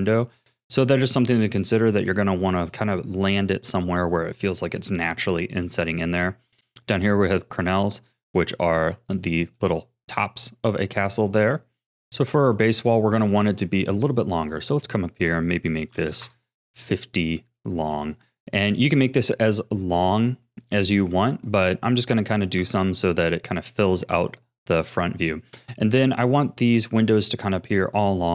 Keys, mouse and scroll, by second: 2.1-6.6 middle drag, 6.6-7.7 scroll down 1, 7.7 click, 8.1-8.5 scroll down 3, 8.5-11.4 shift+middle drag, 11.4 click, 12.8-15.1 scroll up 24, 15.1-17.1 drag, 17.1 scroll down 4, 17.6-18.3 shift+middle drag, 18.3 scroll down 4, 21.8 scroll up 2, 22.6-23.8 middle drag, 23.8-25.5 scroll up 6, 25.5-26.9 scroll down 4, 27.3 scroll down 4.